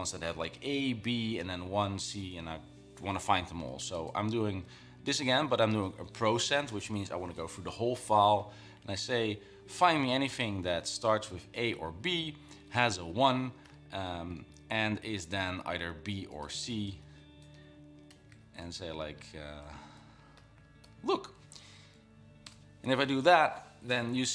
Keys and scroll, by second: 4.0 typing, 5.2-6.0 typing, 8.9 l, 10.3-12.7 typing, 13.8 [, 15.7-21.2 typing.